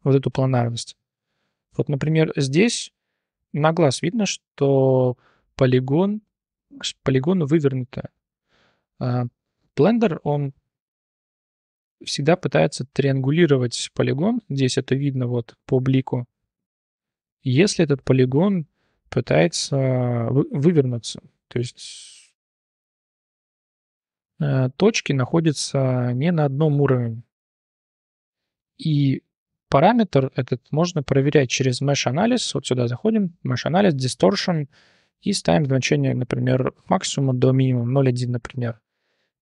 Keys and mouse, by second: 1.7 Tab, 2.1 1, 2.3 right click, 2.6-3.7 drag, 4.1 click, 5.0-6.3 drag, 6.6-6.9 drag, 7.7-9.1 drag, 9.4-9.7 drag, 10.0 1, 10.3 click, 13.0-13.4 drag, 14.7 drag, 16.3-16.8 middle drag, 17.0-17.5 middle drag, 18.4-18.9 middle drag, 23.4-24.4 drag, 25.0-26.8 drag, 27.7-28.0 drag, 28.4 click, 30.0-38.1 drag, 39.3 shift+click.